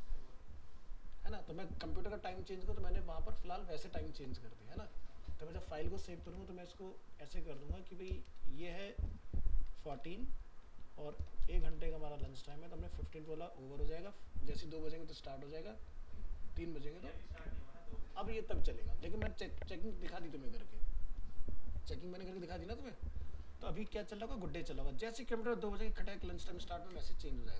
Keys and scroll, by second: 6.3 alt+Tab, 24.2 ctrl+s.